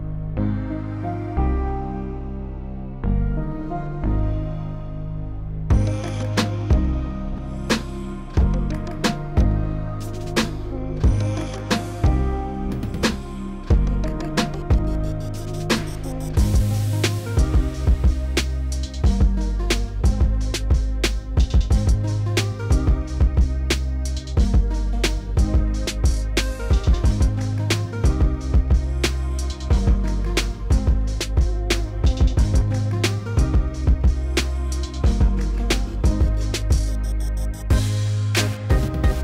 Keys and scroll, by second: 11.1 s, 13.9-14.8 typing, 19.0 s, 20.6-21.9 typing, 24.6 w, 36.6 3.